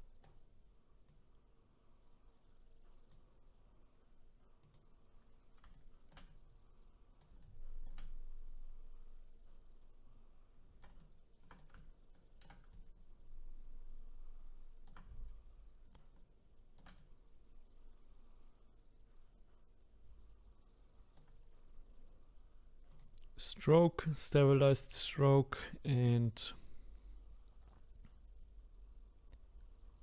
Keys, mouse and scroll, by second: 1.1-4.1 drag, 4.6 click, 5.7-22.0 shift+right drag, 22.9-25.9 drag, 26.0-29.0 drag.